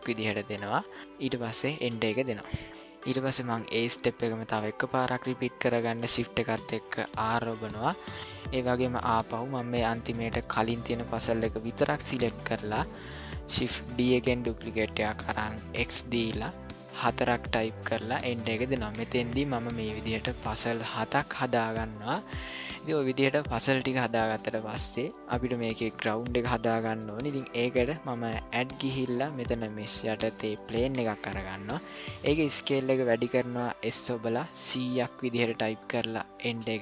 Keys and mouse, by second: 7.1 shift+r, 14.0 shift+d, 21.5-21.9 ctrl+middle drag, 22.3-23.3 middle drag, 23.7-24.0 ctrl+middle drag, 24.3-24.9 middle drag, 28.5-30.8 drag, 33.8 s.